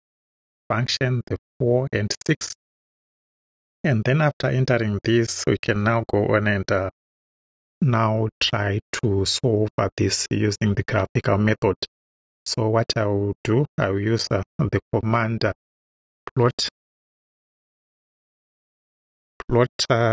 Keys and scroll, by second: 16.0-18.2 typing.